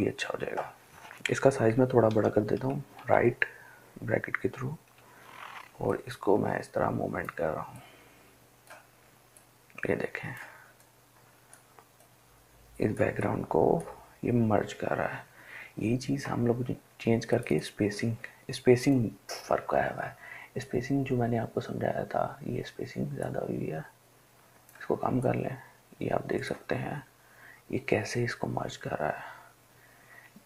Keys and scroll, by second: 1.8-3.1 typing, 5.1 ].